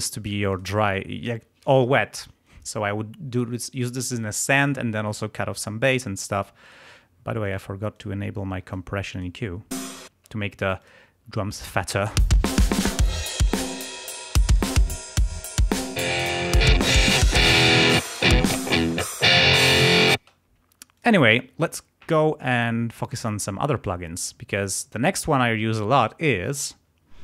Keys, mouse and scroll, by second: 0.4 click, 6.6 right click, 7.4 click, 7.9 click, 8.5 click, 9.0 click, 9.7 space, 10.7 click, 12.1 space, 15.9 click, 17.1 click, 18.6-19.0 scroll up 1, 20.1 space, 20.9 click.